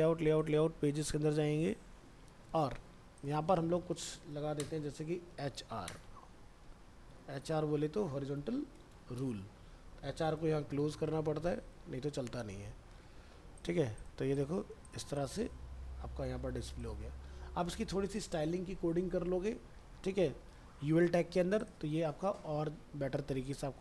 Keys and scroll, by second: 6.6 ctrl+z, 11.3 ctrl+s, 12.2 alt+Tab, 15.8 alt+Tab.